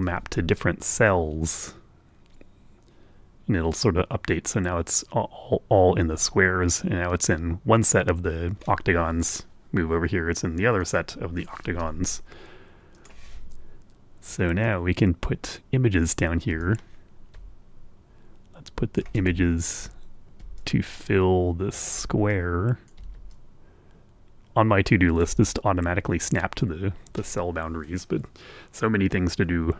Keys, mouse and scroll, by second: 0.1-11.1 drag, 10.9 middle click, 10.9 right click, 11.7 Escape, 13.0 click, 14.7-16.3 drag, 16.6-19.2 ctrl+drag, 19.4-19.8 ctrl+scroll up 1, 20.6-22.0 ctrl+drag, 22.3 click, 23.3-25.5 ctrl+shift+drag.